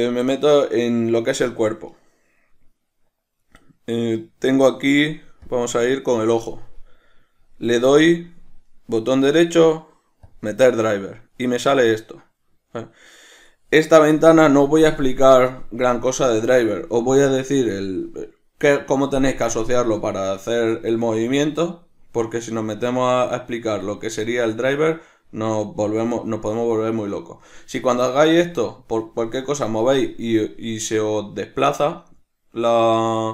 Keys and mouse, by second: 5.6 click, 8.8-33.3 right drag.